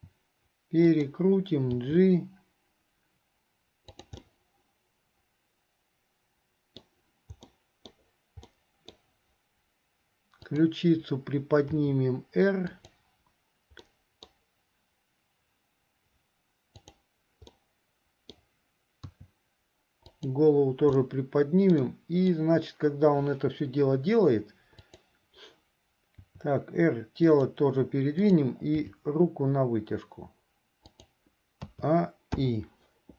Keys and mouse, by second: 2.0 g, 4.5 middle click, 5.3-7.0 drag, 5.3-7.0 right drag, 7.7 click, 7.7 right click, 8.7 click, 8.7 middle click, 10.5 click, 11.9 r, 13.9 click, 13.9 middle click, 16.8 click, 17.7 middle click, 19.2 r, 21.2-22.5 drag, 24.8 click, 26.2 r, 28.4 click, 28.9 g, 31.9 a, 32.6 i.